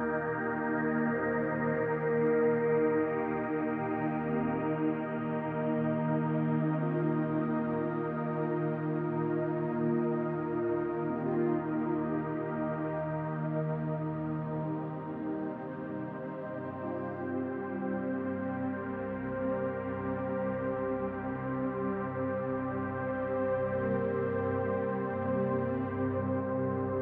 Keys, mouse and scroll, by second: 0.7 click, 1.0 l, 1.7 click, 3.1 middle click, 4.0 click, 4.3 middle click, 5.1 l, 5.9 click, 6.3 l, 7.0 click, 8.4 click, 8.6 l, 10.3 middle click, 11.0 click, 12.6 middle click, 14.3 click, 16.0 click, 17.1-17.7 scroll down 3, 17.4 middle click, 18.8 Tab, 19.3-20.2 scroll down 2, 19.7 middle click, 20.9-21.6 scroll down 1, 21.6-22.0 scroll down 3, 23.8 click, 25.5 click, 26.2-26.7 scroll down 4, 26.7 shift+middle click.